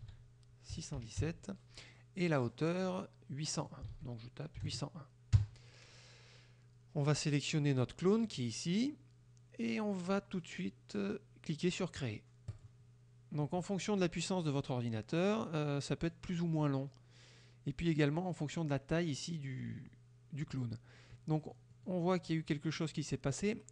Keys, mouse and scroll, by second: 0.1 ctrl+a, 0.8 KP_6, 1.0 KP_1, 1.3 KP_7, 3.6 ctrl+click, 3.9 ctrl+a, 4.7 KP_0, 5.4 KP_1, 8.3 click, 12.6 click, 14.5 middle click, 15.3 middle click, 15.7-16.4 middle drag, 21.5 middle click, 22.4 middle click.